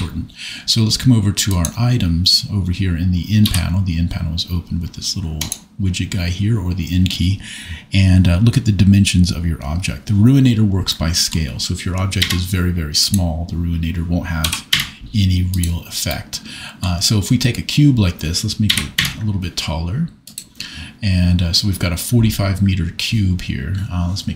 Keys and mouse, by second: 3.4 n, 5.4 click, 10.9 middle click, 12.3 s, 14.4 g, 14.7 z, 15.5 click, 18.7 s, 18.9 z, 20.2 click.